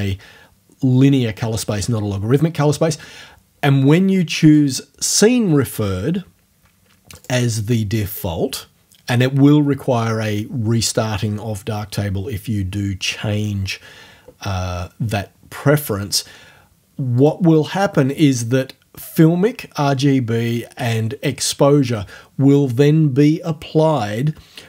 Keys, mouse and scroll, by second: 4.4 click, 7.2 click, 17.2 click.